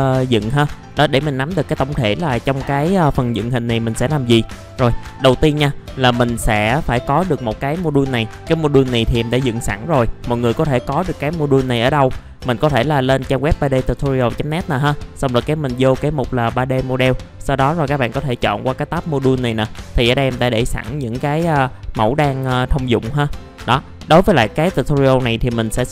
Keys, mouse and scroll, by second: 4.7 scroll up 1, 5.3 click, 5.9 scroll up 1, 6.6 alt+middle click, 7.3 scroll up 1, 7.8 F4, 10.0-12.5 scroll down 1, 12.5 click, 21.6 scroll down 1, 24.7-25.8 scroll up 1.